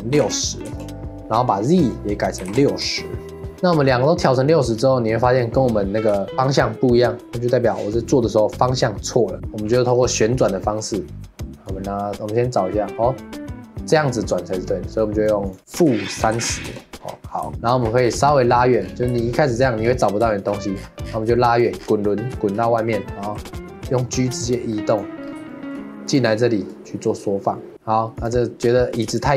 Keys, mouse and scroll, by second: 3.5-4.5 scroll down 7, 6.2-7.5 shift+middle drag, 11.6-14.7 drag, 15.5-17.5 drag, 17.5-18.0 shift+middle drag, 18.0-18.5 scroll down 1, 18.5-18.9 scroll up 8, 19.2 shift+middle click, 20.0 scroll down 2, 20.3-20.7 shift+middle drag, 20.7 scroll down 6, 21.4-21.8 shift+middle drag, 21.8 scroll down 6, 22.4-23.2 shift+middle drag, 23.2 g, 24.9 g, 25.2 scroll up 2, 25.5-26.1 shift+middle drag, 26.1 click, 26.7-27.7 drag, 27.7-28.2 shift+middle drag, 28.2 click, 29.1 shift+click.